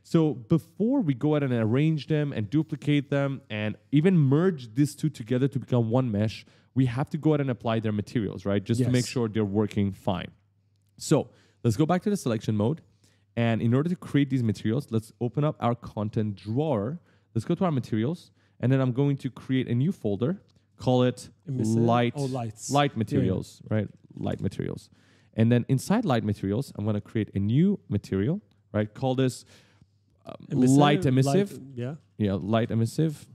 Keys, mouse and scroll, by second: 0.4 right click, 11.7 click, 12.3 click, 12.7-14.4 typing, 12.8 right click, 16.2 click, 16.7 click, 17.4 click, 18.5 click, 19.0 right click, 19.9 click, 21.3-24.4 typing, 25.5 click, 25.6 click, 26.7 right click, 27.9 click, 30.4-32.5 typing, 32.9 Return.